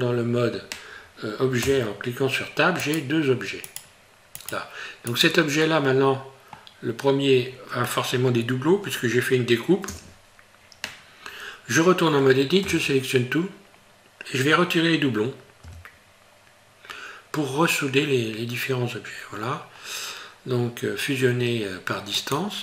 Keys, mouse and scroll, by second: 2.8 right click, 3.7 right click, 4.4 right click, 5.1 right click, 5.7 middle click, 7.9 middle click, 8.7 scroll up 1, 9.9 Tab, 12.6 a, 13.9 scroll down 1, 15.7 q.